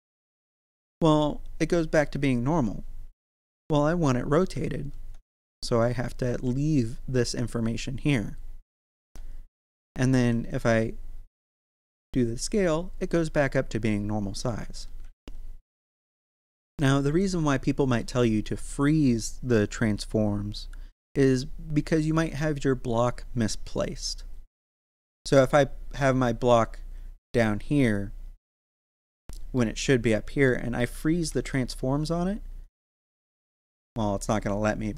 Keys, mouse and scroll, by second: 0.3 scroll up 1, 4.7 ctrl+z, 8.2 scroll down 1, 10.3 ctrl+a, 11.6 click, 14.8 ctrl+z, 15.9-16.8 scroll down 1, 16.8-21.7 middle drag, 21.7 right click, 25.1-27.2 middle drag, 27.2 g, 27.8 click, 29.3 middle click, 31.3 ctrl+a, 32.6 click.